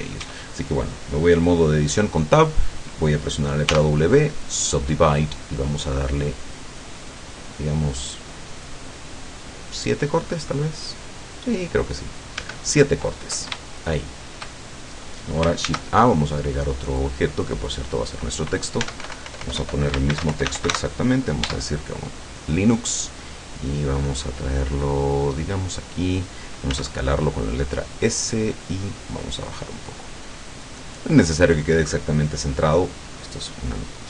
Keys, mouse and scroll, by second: 0.2 Tab, 3.7 w, 4.7 click, 6.6-7.9 drag, 8.7 click, 12.5 Tab, 13.8-14.6 shift+middle drag, 14.7-15.5 shift+scroll up 3, 15.7 shift+a, 17.0 click, 18.9 Tab, 19.1-21.3 typing, 21.5 Tab, 23.9-24.8 drag, 25.2-26.5 drag, 26.7 s, 28.1 click, 29.2-30.9 drag.